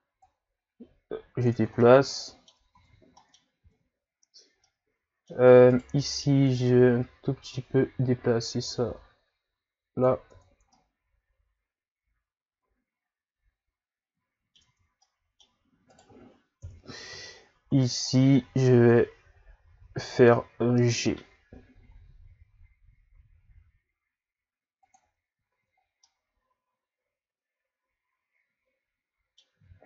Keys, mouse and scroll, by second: 0.2 click, 1.6 Tab, 1.8 middle click, 2.7 ctrl+z, 3.1 middle click, 3.6 ctrl+z, 4.6-5.7 middle drag, 5.7 right click, 6.0 middle click, 6.7 click, 10.3 Tab, 10.7-13.8 middle drag, 14.7 Tab, 15.1 middle click, 15.9 right click, 16.6 KP_1, 17.4-19.1 shift+scroll up 8, 19.2 g, 25.0 Tab, 25.5 a, 25.8 scroll down 2, 26.0-29.0 middle drag.